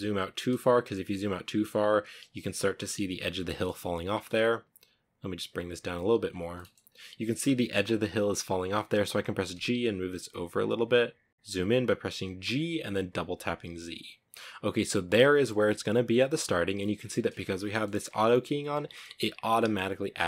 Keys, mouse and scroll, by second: 2.6 shift+middle click, 2.8-3.8 scroll up 2, 4.5 click, 5.5 scroll down 3, 5.9 shift+middle click, 6.0-6.4 scroll up 1, 6.4-6.8 scroll down 1, 8.7 g, 11.3 g, 12.4 g.